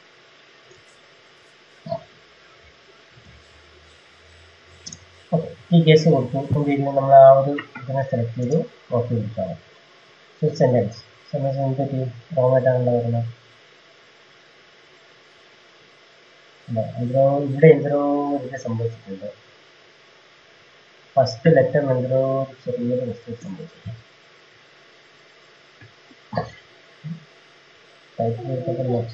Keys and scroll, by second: 0.0 Escape, 1.6 Escape, 1.9 Escape, 2.5-3.4 typing, 23.3 BackSpace.